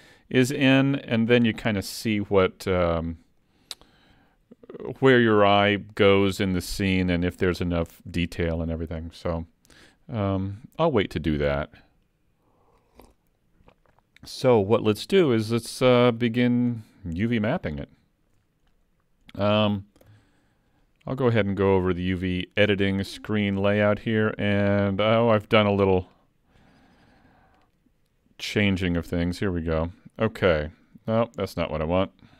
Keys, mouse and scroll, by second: 0.4 middle click, 16.7-17.5 scroll down 4, 17.6 shift+middle click, 18.7-19.3 scroll down 1, 19.3 middle click, 20.1 KP_Decimal.